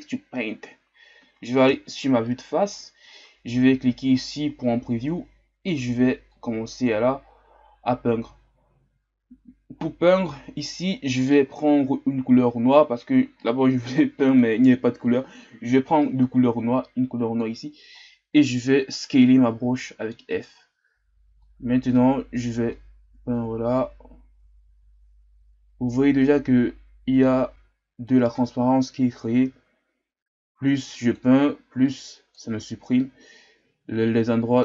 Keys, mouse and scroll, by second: 0.0 click, 1.7 KP_1, 4.3 click, 5.0-6.3 scroll up 2, 6.3-19.0 drag, 19.0 f, 20.9 scroll up 2, 21.4-25.7 drag, 31.8 click, 32.5-33.0 scroll down 3, 33.0-34.6 middle drag.